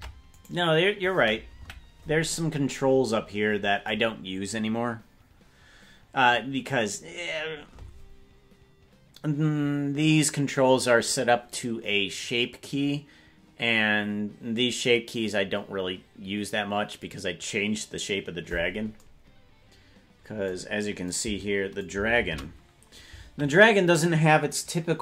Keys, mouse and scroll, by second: 0.5 right click, 1.5 KP_Decimal, 18.6-18.9 scroll down 1, 22.2 shift+`.